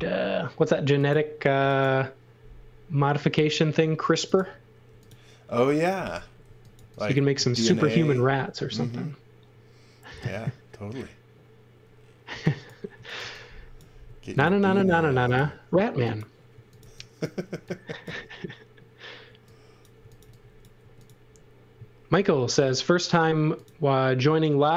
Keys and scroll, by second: 4.8 m, 6.4 x, 6.8 v, 12.3 x, 13.2 v, 14.0 space, 15.0 m, 16.5 x, 16.8 v, 17.5 x, 19.2 x, 20.2 v, 20.8 space, 22.5 l.